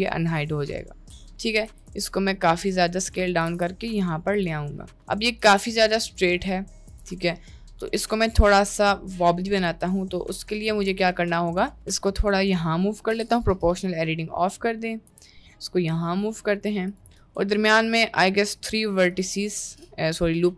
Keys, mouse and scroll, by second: 0.3 click, 1.2 click, 1.7 s, 3.5 g, 4.7 middle click, 5.4 g, 6.9 click, 7.4-8.0 middle drag, 9.7 Tab, 12.0 g, 13.1 o, 13.1 p, 15.1 g, 17.3 ctrl+r.